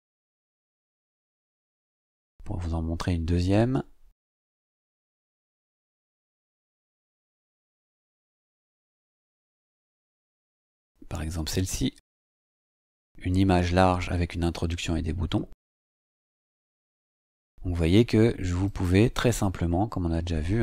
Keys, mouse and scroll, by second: 0.8-1.9 scroll down 2, 1.9 click, 7.0-8.2 scroll down 1, 8.2-15.8 scroll down 2, 15.8 click, 17.5-18.2 scroll up 4, 18.6 click.